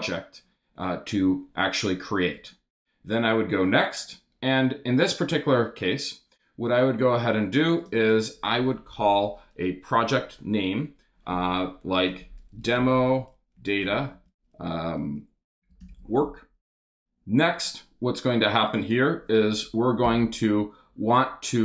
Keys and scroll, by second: 10.0 BackSpace, 12.3-16.4 typing, 20.0 BackSpace.